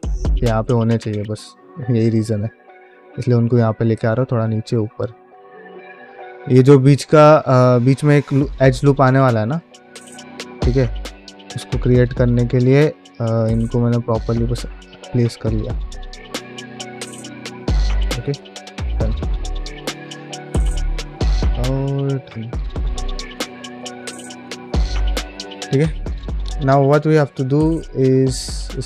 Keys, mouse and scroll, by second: 0.0 middle click, 0.3 shift+middle click, 0.9 click, 1.1 g, 1.6 click, 1.8 g, 2.1 shift+middle click, 2.3 middle click, 2.8 click, 2.9 g, 3.4 click, 3.5 g, 3.9 click, 4.0 g, 4.4 shift+middle click, 4.7 middle click, 5.1 click, 5.2 g, 5.6 middle click, 6.2 click, 6.3 g, 7.0 click, 7.1 g, 7.5 click, 7.7 g, 8.8 click, 8.9 g, 9.2 middle click, 9.9 middle click, 10.3 ctrl+middle click, 10.8 ctrl+Tab, 12.3 f, 12.7-16.4 shift+drag, 16.6 middle click, 17.0 shift+click, 18.1 Tab, 18.6 middle click, 18.9 shift+middle click, 19.3 ctrl+Tab, 19.7 shift+click, 20.7 shift+middle click, 21.1 middle click, 21.6 shift+click, 22.1 shift+middle click, 22.4 shift+middle click, 22.8 middle click, 23.3 shift+click, 24.4 middle click, 24.8 ctrl+middle click, 25.4 Tab, 25.8 middle click, 26.1 shift+middle click, 26.4 ctrl+Tab, 26.7-27.7 middle drag, 28.1 ctrl+space, 28.4 q.